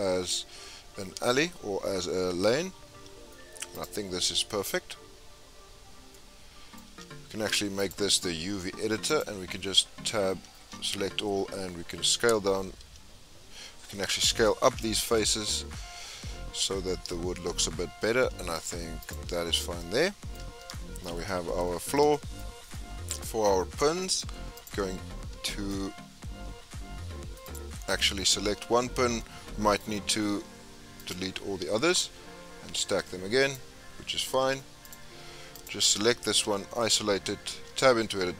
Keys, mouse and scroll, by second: 5.6-6.1 scroll up 5, 6.1-7.8 middle drag, 7.8-10.0 drag, 10.0 Tab, 10.6 a, 11.4-12.8 scroll down 11, 12.8 a, 14.6 s, 19.4 Tab, 19.9-21.1 middle drag, 21.1 scroll down 2, 21.3-22.4 middle drag, 22.4-22.7 scroll up 3, 22.7-23.6 middle drag, 23.6-24.0 scroll up 2, 24.0-24.6 middle drag, 24.6 click, 25.5 shift+middle click, 26.2-31.1 shift+middle drag, 31.1 click, 33.5 click, 34.9 x, 35.1-35.6 scroll up 2, 35.6 click, 36.4 KP_Divide, 36.9-37.2 scroll up 4, 37.2-37.5 scroll down 7, 37.7 Tab, 37.9-38.3 scroll up 4.